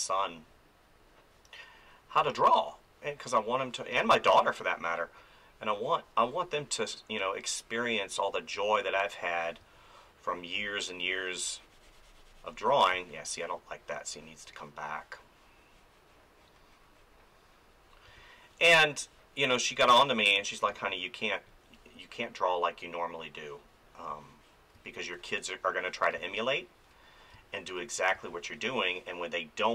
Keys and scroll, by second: 2.2 space, 3.9 space, 9.6 space, 12.9 space, 18.0 space, 20.7 space, 24.7 space.